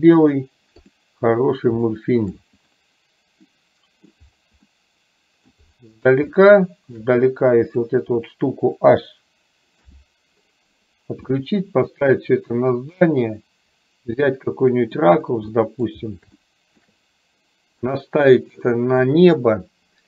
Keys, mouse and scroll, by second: 1.0 click, 1.9-2.5 shift+middle drag, 3.6 middle click, 4.8-5.5 middle drag, 6.4-7.0 shift+middle drag, 7.6 click, 9.9 h, 11.3-15.1 middle drag, 15.6 middle drag, 16.5-16.9 shift+middle drag, 18.0-18.6 middle drag.